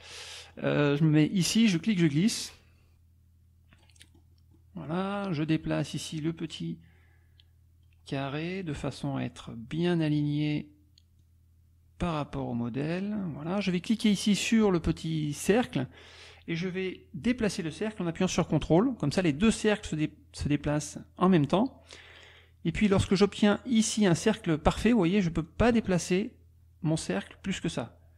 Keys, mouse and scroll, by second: 0.1 click, 6.5-8.9 drag, 11.2-13.2 drag, 15.8-23.1 drag, 25.4 click, 25.7-26.7 scroll up 3, 26.7-28.1 ctrl+scroll up 1.